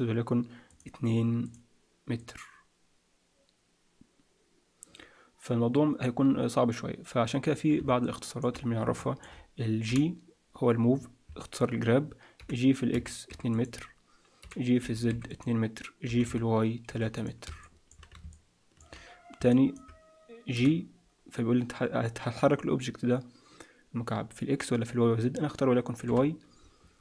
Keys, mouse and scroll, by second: 0.6 click, 1.4 click, 2.2 click, 8.0 shift+middle click, 9.8 g, 12.4 g, 16.0 g, 17.6 middle click, 18.3 shift+middle click, 19.4 middle click, 20.5 g.